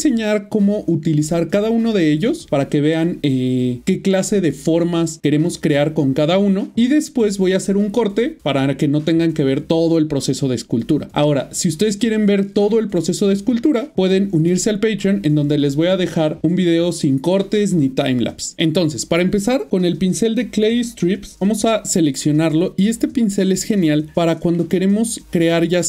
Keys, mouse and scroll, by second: 21.2 click, 22.0 middle click.